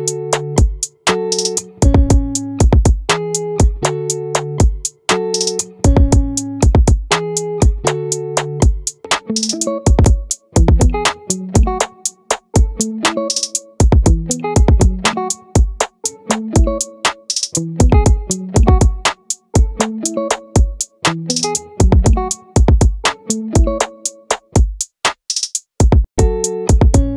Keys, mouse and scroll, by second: 15.4 middle click, 18.9 z, 21.5 Tab.